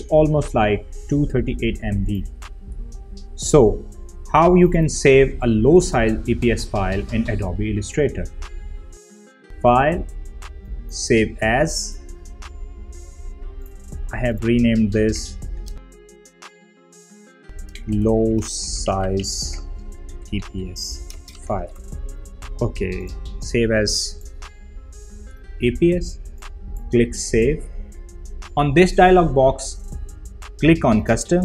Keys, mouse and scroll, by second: 1.9 typing, 3.0 click, 3.0 typing, 5.6 click, 7.3 click, 10.2 click, 15.0 click, 16.7 Right, 17.3 shift+Home, 17.6-22.3 typing, 23.1-29.4 drag, 31.1 click.